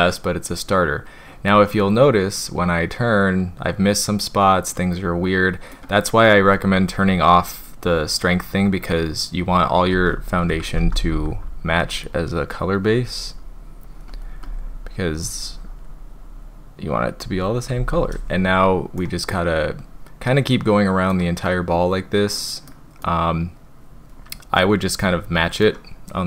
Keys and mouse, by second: 1.7-5.7 middle drag, 7.8-9.7 drag, 10.5-11.3 typing, 11.5 click, 11.8 click, 12.8 click, 13.1 click, 13.4 click, 13.8 click, 14.1 click, 14.4-17.2 drag, 19.0-21.1 middle drag, 22.4 middle click, 23.0-25.6 middle drag.